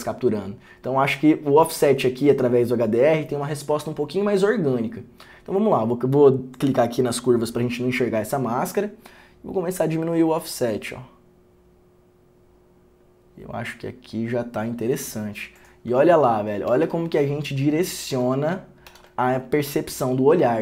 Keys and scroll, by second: 16.3 ctrl+d, 16.9 ctrl+d, 19.0 ctrl+d.